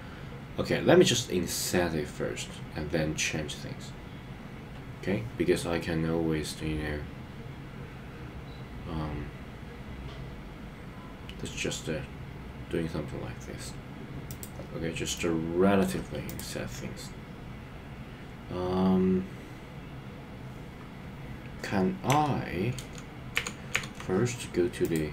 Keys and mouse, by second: 14.3 click, 15.1 middle click, 16.3 click, 22.9 super+z, 23.5 super+z, 23.9 super+z, 24.9 click.